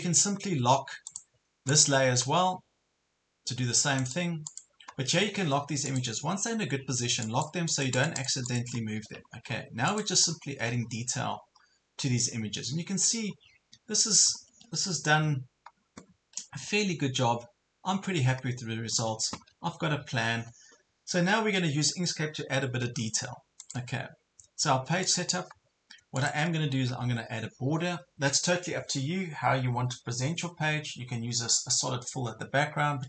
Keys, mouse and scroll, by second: 6.3 ctrl+scroll down 1, 6.8 ctrl+scroll up 1, 7.2 click, 8.8 ctrl+scroll down 1, 9.3 ctrl+scroll up 1, 9.9 click, 10.3 ctrl+scroll up 1, 10.4 ctrl+scroll down 1, 10.8 ctrl+scroll up 1, 12.0 ctrl+scroll down 1.